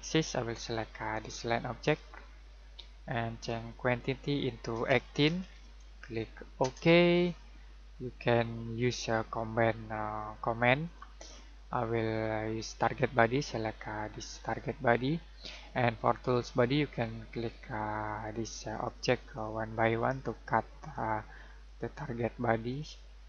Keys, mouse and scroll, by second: 4.7-5.2 typing, 6.6 Return, 8.7 click, 14.4 click, 17.3 click.